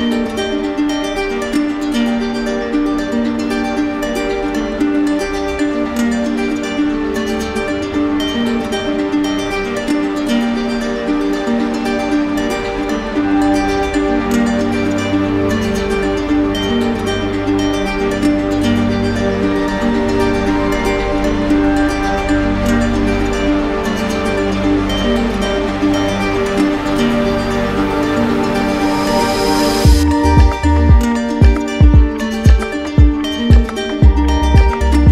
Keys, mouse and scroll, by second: 0.5 alt+click, 2.4 shift+click, 3.4 shift+click, 4.1 right click, 5.0 click, 5.5 right click, 6.3 right click, 7.2 shift+click, 7.4 shift+click, 7.8 shift+click, 8.1 shift+click, 8.9 click, 9.6 shift+click, 9.9 shift+click, 10.4 shift+click, 10.7 shift+click, 11.3 right click, 11.9 shift+click, 12.9 right click, 13.3 shift+click, 14.9 right click, 15.5 shift+click, 15.7 shift+click, 16.0 shift+click, 16.9 shift+click, 17.5 right click, 19.0 shift+click, 19.6 shift+click, 20.2 right click, 20.8 right click, 20.8 shift+click, 21.4 shift+click, 21.7 shift+click, 22.2 right click, 23.4 shift+click, 23.7 shift+click, 24.3 right click, 25.6 alt+right click, 26.5 shift+click, 27.7 right click, 28.9 shift+click, 29.4 shift+click, 30.0 shift+click, 30.2 shift+click, 30.6 shift+click, 30.9 shift+click, 31.2 shift+click, 31.7 shift+click, 31.8 shift+click, 32.0 shift+click, 32.6 right click, 33.4 alt+right click, 34.0 shift+right click.